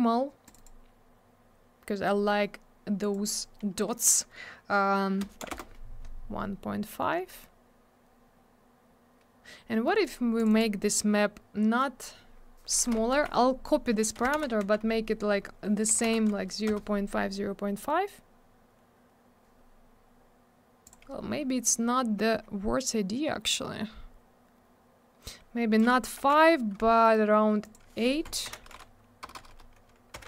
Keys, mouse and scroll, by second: 0.5 click, 0.5 click, 0.6 click, 0.6 click, 3.0 click, 3.1 click, 5.2 BackSpace, 5.4 5, 5.5 Return, 9.9 middle click, 10.0 middle click, 10.4 click, 10.5 double click, 10.5 click, 10.6 click, 11.8 click, 13.1 ctrl+c, 14.2 0, 14.6 5, 15.3 Tab, 15.9 0, 16.2 5, 16.7 Return, 20.9 click, 20.9 click, 21.2 Tab, 21.7 scroll down 1, 22.2 Tab, 25.8 click, 25.9 click, 27.0 middle click, 27.1 middle click, 27.6 click.